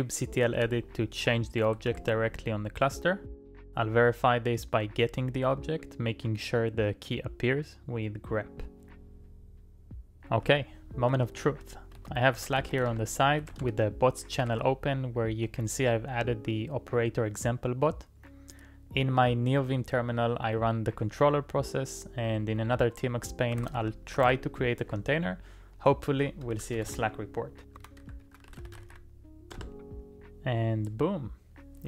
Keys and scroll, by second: 0.5 shift+w, 0.6 shift+w, 1.8 shift+z, 2.0 shift+z, 3.9-14.1 typing, 12.0 ctrl+c, 14.5 ctrl+e, 15.3 Return, 23.6 ctrl+a, 23.8 z, 24.4 j, 26.1-30.0 typing.